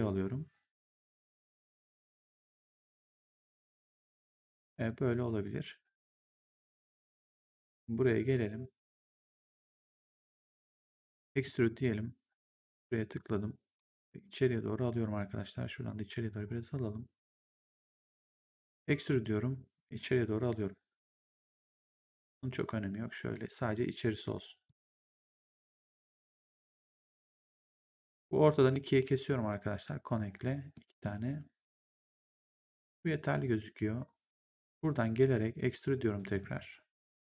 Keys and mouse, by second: 2.4 right click, 4.6 ctrl+1, 6.6 right click, 8.0 click, 8.8 right click, 9.4 click, 11.3 click, 12.5 click, 13.7 click, 15.7 click, 19.0 click, 22.2 click, 24.6 click, 28.0 right click, 28.5 click, 29.6 click, 32.7 w, 33.3 right click, 34.6 click, 36.2 click.